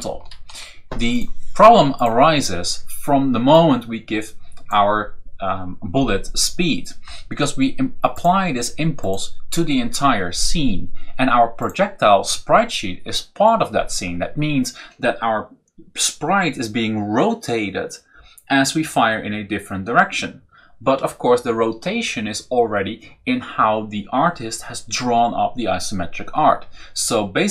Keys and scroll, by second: 0.0 Left, 0.2 Up, 1.0 Up.